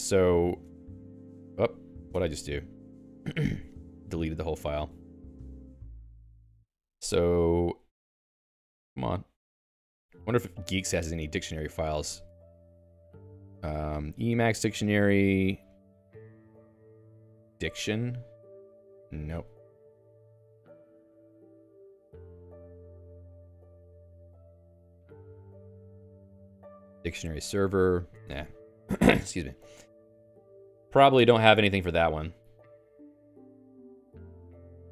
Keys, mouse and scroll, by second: 0.7 ctrl+space, 0.8-1.6 typing, 2.1 Escape, 2.3 Escape, 3.1 ctrl+/, 4.0 Escape, 22.1 Escape.